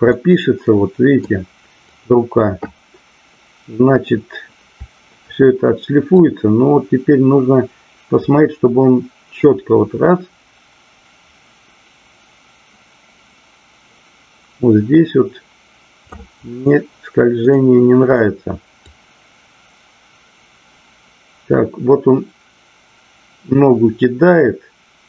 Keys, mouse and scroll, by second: 0.1-1.2 middle drag, 2.0 click, 6.2-16.3 drag, 16.5-18.1 middle drag, 18.9-25.0 drag.